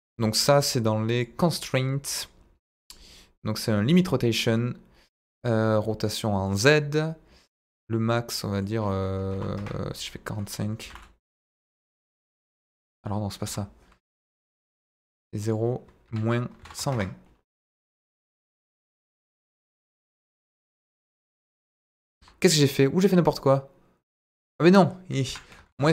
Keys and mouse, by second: 1.1 click, 1.6-3.9 drag, 6.4 click, 8.6-9.8 drag, 10.8 r, 10.8 z, 13.4 Escape, 15.4-17.2 drag, 18.2 r, 19.2 z, 20.2 Escape, 21.0 r, 22.1 Escape, 24.7-25.9 drag.